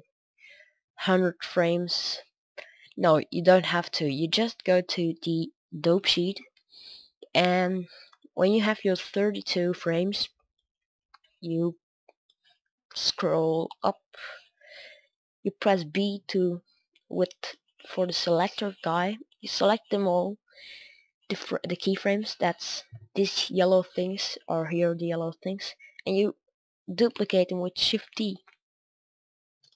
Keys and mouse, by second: 26.9 shift+d.